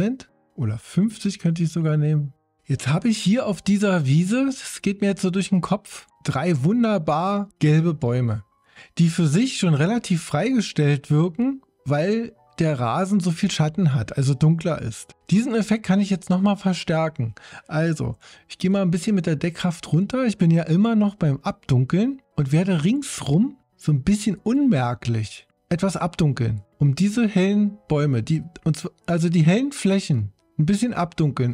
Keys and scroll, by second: 19.1 3.